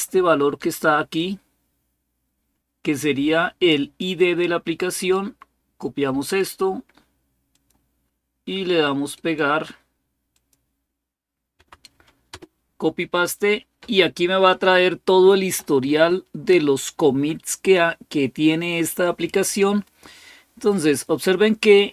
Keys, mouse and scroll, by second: 0.9-3.8 drag, 4.8 right click, 6.0 right click, 7.3 click, 8.9 right click, 10.1 click, 11.3 Right, 12.1 Return, 21.2-21.9 scroll up 2.